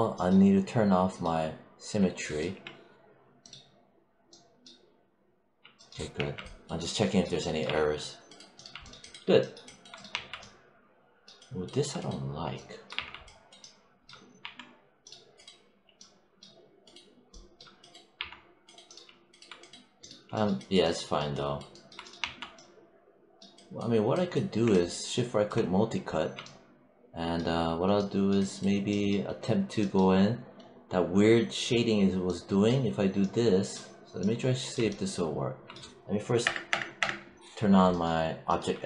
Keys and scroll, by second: 2.3 4, 6.0 5, 7.5 3, 10.0 1, 12.8 3, 14.2 1, 18.0 3, 22.0 1, 36.3 BackSpace.